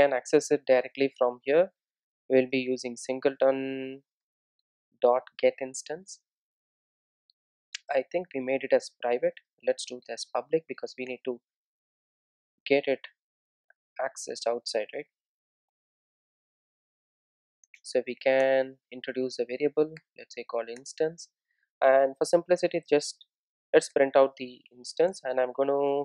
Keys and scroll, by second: 4.3 Return, 11.1 Return, 12.3 super+e, 14.3 Return, 17.7 Return, 19.0 alt+Return, 22.3 Tab, 24.3 Return.